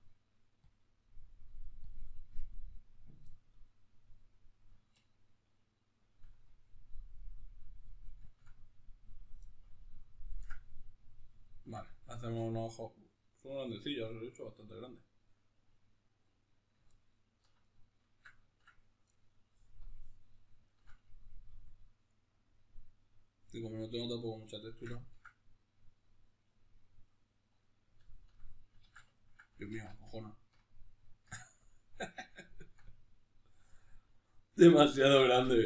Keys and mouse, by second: 3.0-5.8 middle drag, 5.8-9.2 ctrl+drag, 9.2-19.6 ctrl+middle drag, 19.6 click, 20.1-22.2 middle drag, 21.2 f, 22.2 click, 23.4 f, 24.0 click, 24.4-26.2 shift+middle drag, 26.2-27.4 drag, 27.4-31.4 ctrl+middle drag, 28.6 ctrl+z, 29.6 alt+q, 31.4 click, 32.0-35.6 ctrl+middle drag, 35.2 ctrl+z.